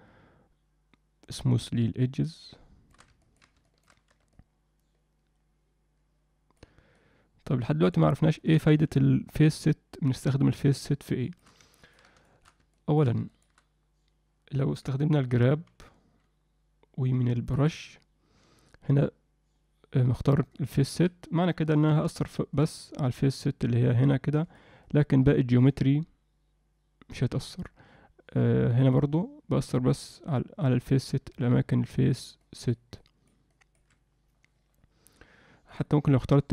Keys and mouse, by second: 3.2 ctrl+middle click, 3.6 alt+shift+middle click, 4.3-6.6 shift+drag, 6.9-7.9 shift+drag, 8.3 alt+shift+middle click, 8.7-11.4 shift+drag, 11.7 ctrl+alt+middle click, 12.2 alt+shift+middle click, 12.7 ctrl+alt+middle click, 13.3 alt+shift+middle click, 17.7-21.0 drag, 23.0-24.1 drag, 24.4 click, 24.8-27.4 drag, 28.8-30.7 drag, 31.3 click, 32.4 click, 32.9 click, 33.5 click, 35.9-36.5 drag.